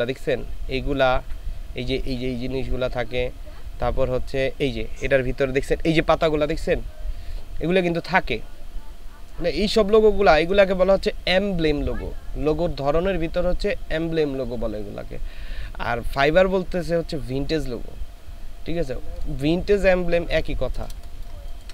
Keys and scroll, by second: 21.0 space.